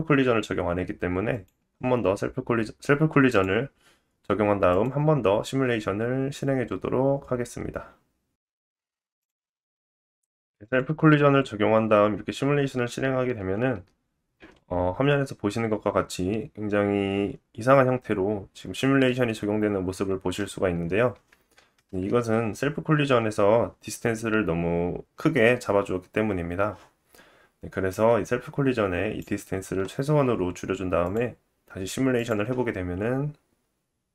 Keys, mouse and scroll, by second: 0.9-1.3 scroll down 1, 1.3 middle click, 1.3 right click, 3.2-8.4 middle drag, 3.2-8.4 right drag, 10.6 click, 22.6 space, 27.8 click, 31.0 click, 32.1 click.